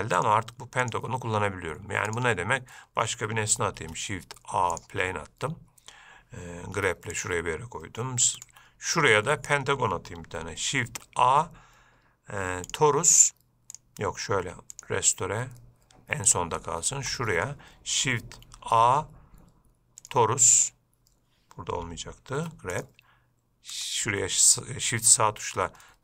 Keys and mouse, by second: 0.6-1.2 drag, 4.1 shift+a, 7.0 g, 9.4-9.8 shift+middle drag, 11.1 shift+a, 14.1-15.1 drag, 16.6 click, 17.4-17.7 shift+middle drag, 18.8 shift+a, 22.6 g, 24.0 shift+right click.